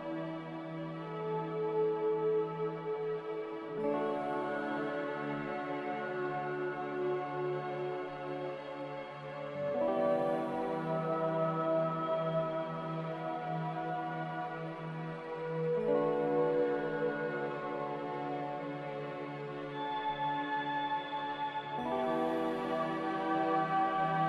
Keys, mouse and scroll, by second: 0.0-0.4 typing, 3.1 a, 17.3 z, 22.1-23.2 typing.